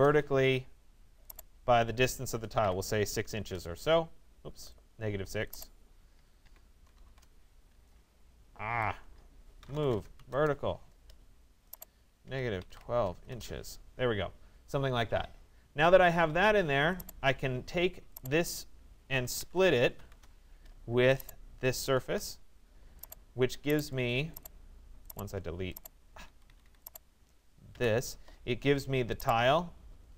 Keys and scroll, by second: 2.7 6, 3.3 Return, 6.2 -, 6.5 6, 7.1 Return, 8.7 Escape, 9.9 Return, 12.3 -, 13.3 Return, 19.7 Return, 25.9 Escape.